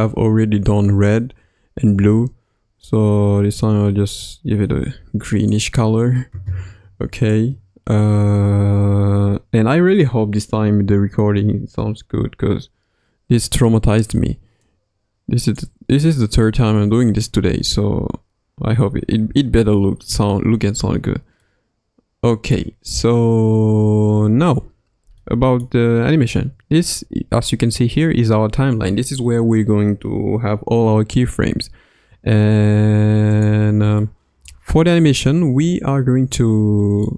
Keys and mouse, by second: 7.2 click, 14.6-15.7 drag, 21.4-22.7 middle drag, 24.3 KP_1, 25.2-25.7 middle drag, 34.0-35.2 middle drag, 36.1 KP_1, 37.0-37.1 middle drag.